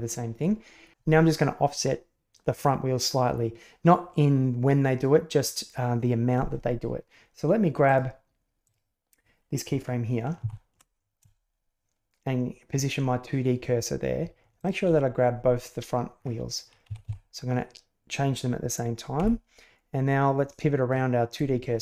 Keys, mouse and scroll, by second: 7.8 right click, 8.6 right click, 10.4 ctrl+g, 14.5 shift+right click, 16.8 a, 16.9 a.